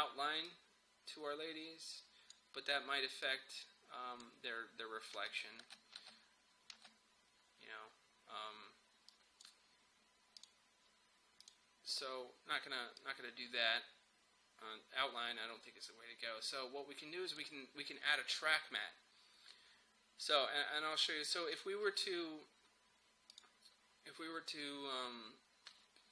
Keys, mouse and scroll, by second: 0.5-5.2 drag, 5.2 space, 9.1-20.1 drag, 21.6 click.